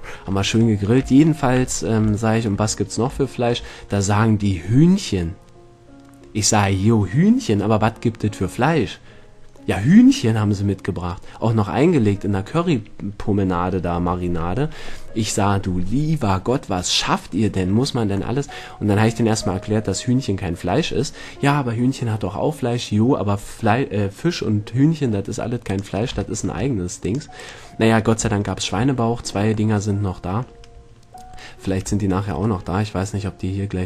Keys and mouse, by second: 1.3 middle drag, 2.5 middle click, 2.9 middle click, 3.5 middle drag, 12.5-13.6 middle drag, 18.5 middle click, 18.9 middle click, 25.9 right click, 26.5 middle click, 28.6-28.9 middle drag, 30.3 middle click, 30.5 middle click, 31.2-31.6 middle drag, 32.2-33.3 middle drag, 33.3 middle drag.